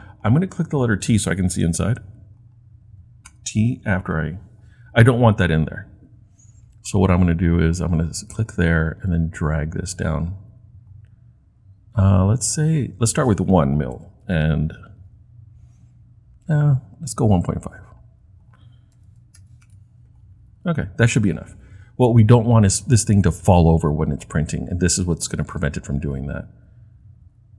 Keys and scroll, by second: 3.3 t, 14.0 1, 14.3 Return, 18.7-19.9 typing.